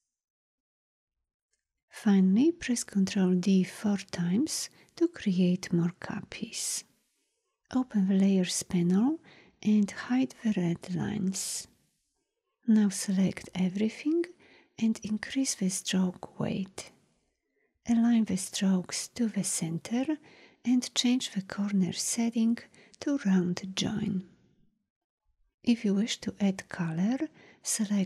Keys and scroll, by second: 2.9 ctrl+d.